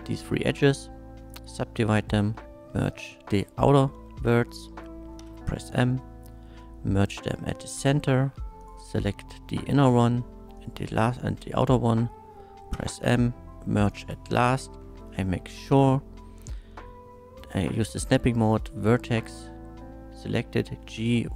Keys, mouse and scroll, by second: 0.3 right click, 1.3 shift+click, 2.0 1, 2.3 middle click, 2.9 click, 5.2 m, 7.2 click, 7.2 m, 7.7 middle click, 8.6 click, 9.1 middle click, 10.6 shift+click, 11.6 shift+middle click, 12.7 m, 13.9 click, 14.6 middle click, 15.1 shift+click, 18.4 click, 20.7 g, 20.8 y.